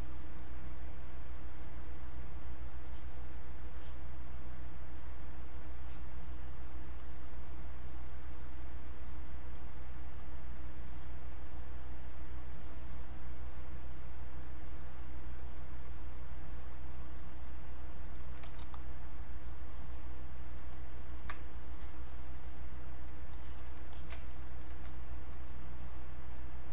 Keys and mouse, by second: 18.2 alt+click, 18.6 r, 19.7 click, 20.7 ctrl+right click, 21.7-23.3 drag, 23.3 click, 23.9 alt+click, 24.3 ctrl+right click, 25.2-26.7 drag.